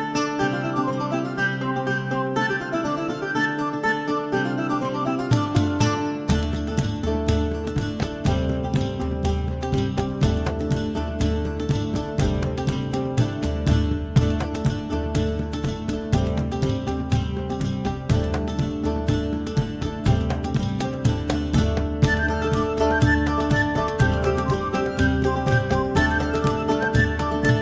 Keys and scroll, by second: 12.7 ctrl+x, 14.3 v.